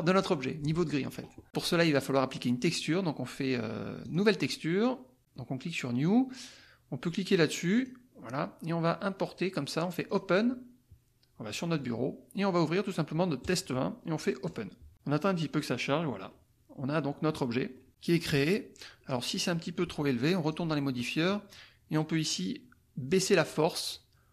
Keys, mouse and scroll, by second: 4.0-5.5 drag, 7.7 click, 10.0 click, 11.8 click, 13.4 click, 14.5 click, 15.6-16.0 scroll up 1, 16.2 click, 17.1-17.5 scroll up 1, 17.7 click, 20.4 click, 23.3 click.